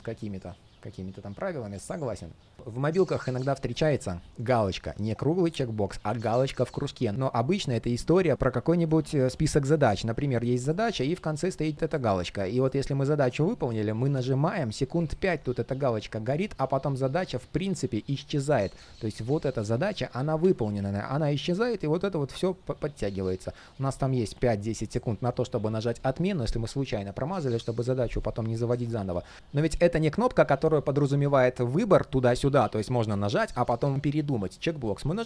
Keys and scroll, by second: 12.0 super+d, 18.6 super+z.